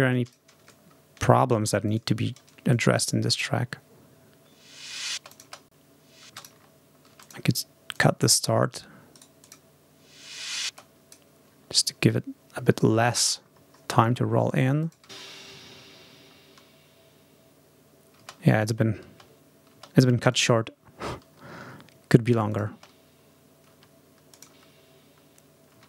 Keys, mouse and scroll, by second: 0.0 click, 0.6-0.9 ctrl+scroll up 2, 1.7 click, 2.3 ctrl+scroll up 2, 2.6 ctrl+click, 3.2 space, 5.0 ctrl+space, 5.2 ctrl+click, 6.1 space, 6.2 click, 7.1 click, 7.8-8.8 drag, 9.0 right click, 9.4 click, 10.5 space, 10.6 click, 11.6 ctrl+scroll up 2, 11.9-12.9 ctrl+scroll down 4, 13.2 scroll down 2, 14.0-14.3 scroll up 2, 14.7 click, 14.9 space, 16.2 ctrl+scroll up 2, 18.0 space, 18.4 click, 18.9 space, 20.2 click, 21.1 ctrl+scroll down 2, 22.3 click, 22.5 space, 23.6 space, 24.2 click, 24.5 space, 25.6 space.